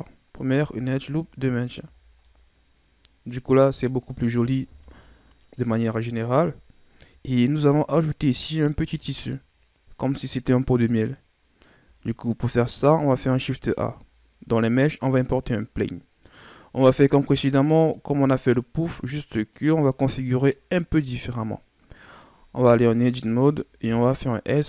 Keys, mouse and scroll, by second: 0.5 Tab, 0.8 scroll down 3, 1.5-2.2 scroll down 7, 2.2-4.7 middle drag, 4.7 KP_1, 6.6 scroll up 5, 7.8-8.4 scroll up 4, 8.4-11.5 scroll down 6, 13.0 shift+a, 16.1-17.3 scroll down 3, 17.9-20.5 drag, 20.5-22.4 scroll up 4, 22.4 Tab, 23.8 s.